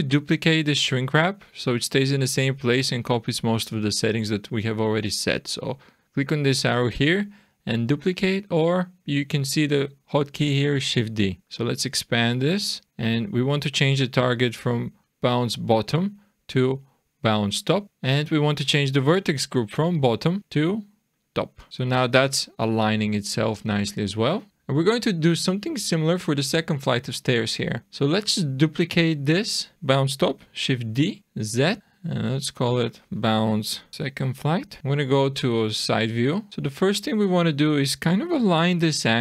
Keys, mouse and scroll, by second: 5.6 click, 11.4 click, 15.0 click, 15.9 click, 20.4 click, 21.7 click, 21.9 click, 24.5 middle click, 24.5 scroll down 3, 25.2-26.8 scroll up 3, 26.8 scroll down 2, 27.6 click, 28.2 click, 30.7 shift+d, 31.8 click, 33.9 BackSpace, 35.2 click, 36.3-38.4 scroll up 4, 36.8 middle click, 38.6 r.